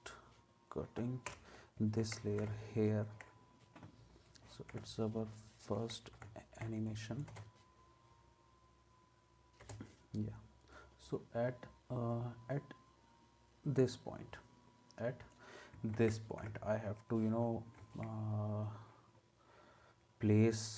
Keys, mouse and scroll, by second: 1.3 alt+], 2.0 ctrl+s, 7.3 space, 9.6 space, 15.9 ctrl+s, 17.8 ctrl+s.